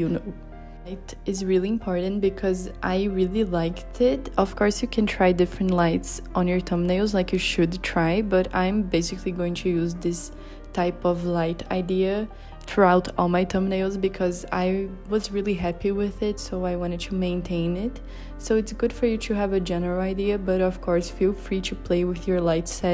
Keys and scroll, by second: 14.3 z, 15.0 h, 17.7 b.